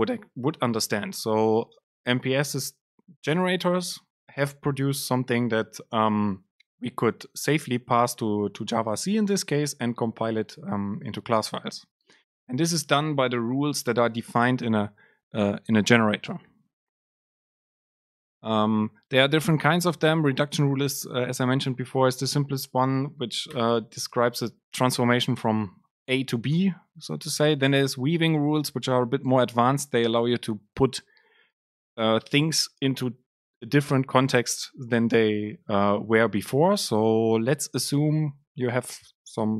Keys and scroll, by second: 23.6 Return, 24.1 Return.